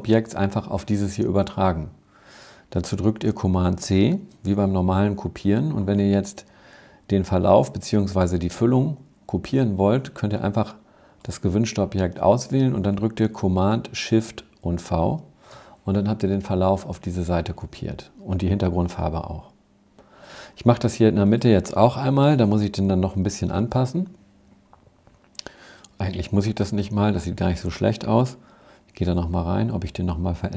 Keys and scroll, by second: 2.8 super+c, 13.8 shift+super+v, 22.2 shift+super+v.